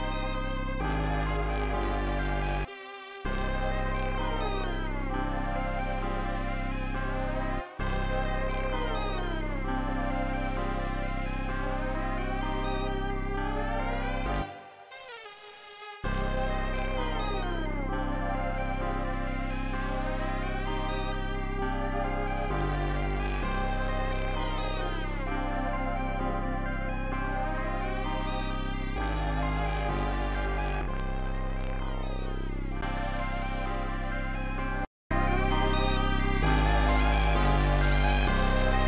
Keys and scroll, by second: 2.6 space, 3.2 space, 7.5 space, 7.7 space, 8.4 super+s, 14.4 space, 16.0 space.